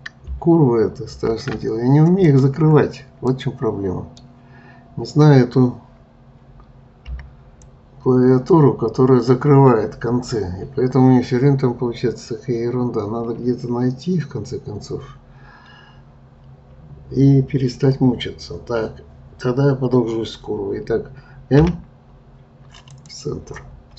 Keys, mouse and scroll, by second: 1.1 ctrl+z, 2.2 middle click, 2.7-3.2 scroll up 2, 3.2-6.3 middle drag, 7.1 b, 21.6 m.